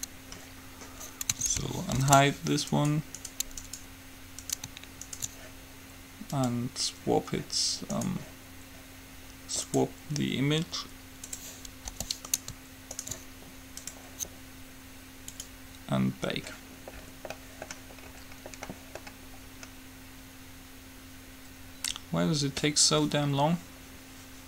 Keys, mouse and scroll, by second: 2.2 alt+h, 3.0-7.1 right drag, 6.5-8.5 drag, 8.1-11.5 right drag, 9.9-11.5 drag, 12.0 g, 13.2-14.9 right drag, 14.0-17.4 drag, 17.1 right click, 17.5-23.8 middle drag.